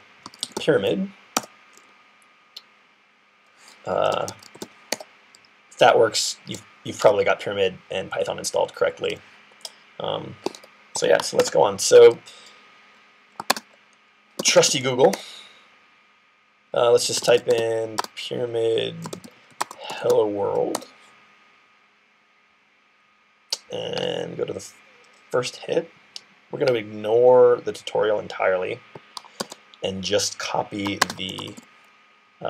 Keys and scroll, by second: 0.0-0.9 typing, 3.5-5.0 typing, 10.4 ctrl+d, 11.2 super+q, 14.0-15.2 typing, 16.6-20.4 typing, 29.2 super+c, 30.9-31.9 typing.